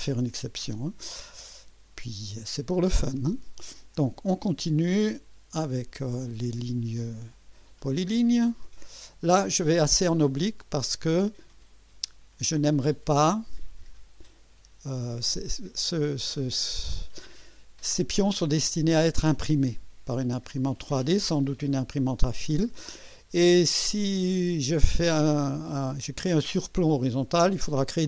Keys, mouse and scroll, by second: 3.7 click, 8.0 click, 11.4 click, 16.8 click, 22.4 click.